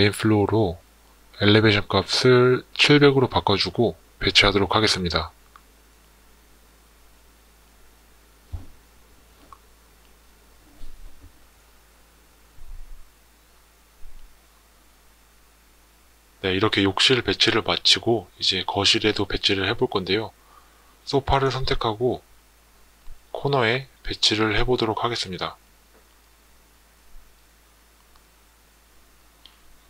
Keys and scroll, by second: 2.0 7, 2.3 0.